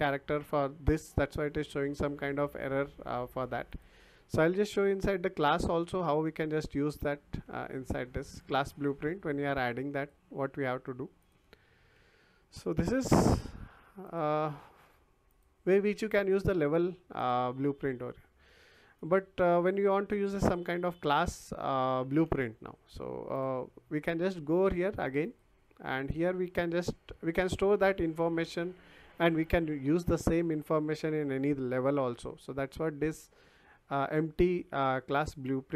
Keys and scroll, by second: 7.6 Delete, 11.9 Delete, 16.1 Delete, 22.2 Delete.